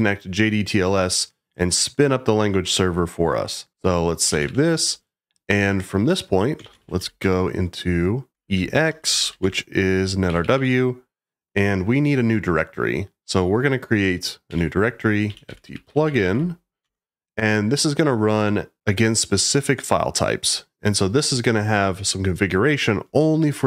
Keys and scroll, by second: 3.7 Escape, 4.0-5.0 typing, 6.6 shift+;, 7.2 shift+;, 8.3-10.2 typing, 12.7 typing, 14.4-16.9 typing.